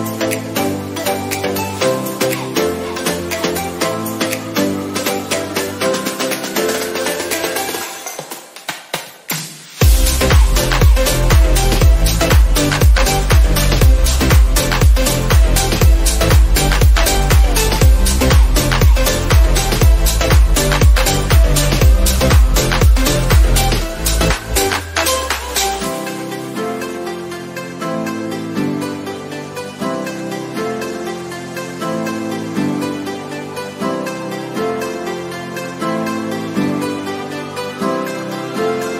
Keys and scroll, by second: 26.2 ctrl++.